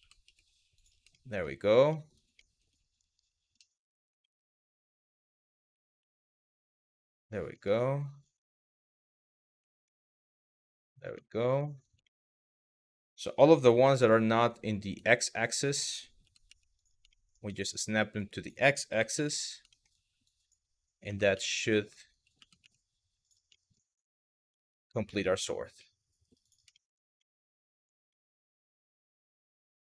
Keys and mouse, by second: 0.4 click, 0.8 shift+middle click, 1.6 shift+middle click, 2.0 shift+middle click, 3.1 KP_1, 3.9 middle click, 4.6 click, 5.3 g, 5.6 x, 6.0 click, 6.7 shift+middle click, 8.0 click, 9.1 g, 9.5 x, 10.1 click, 10.5 shift+middle click, 10.9 shift+middle click, 11.3 shift+middle click, 11.7 shift+middle click, 12.1 shift+middle click, 12.4 click, 13.4 g, 13.6 x, 14.7 shift+middle click, 15.2 click, 16.4 click, 16.8 shift+middle click, 17.2 shift+middle click, 17.8 click, 19.0 click, 19.4 shift+middle click, 19.9 click, 21.1 click, 22.8 click, 23.2 shift+middle click, 24.3 middle click, 25.0 Tab, 25.4-25.9 middle drag, 26.0 click, 26.4 shift+middle drag, 26.9-27.2 middle drag, 27.8-29.6 middle drag.